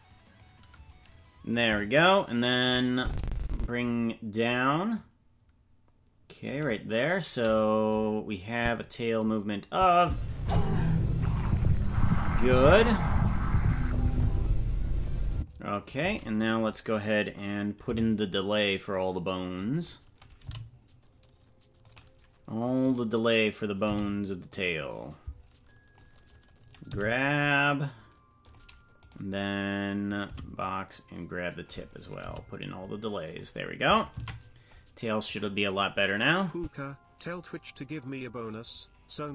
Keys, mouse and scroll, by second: 2.9 click, 4.9-6.5 drag, 8.5 click, 9.7 click, 10.0 space, 15.3 space, 16.3-17.8 right drag, 17.8 b, 21.3 g, 22.8 right click, 23.8 b, 26.8 g, 30.2 right click, 30.2 b, 32.2 g, 36.4 ctrl+s, 36.5 click.